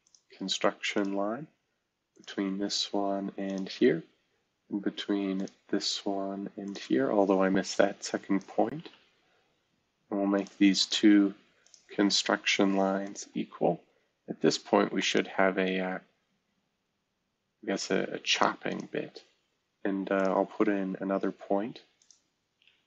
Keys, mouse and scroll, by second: 0.0 click, 0.9 click, 2.1 click, 3.4 click, 5.3 click, 6.6 click, 7.3 Escape, 8.0 click, 8.8 c, 10.3 click, 10.8 click, 11.6 click, 12.3 typing, 13.7 typing, 22.6 Escape.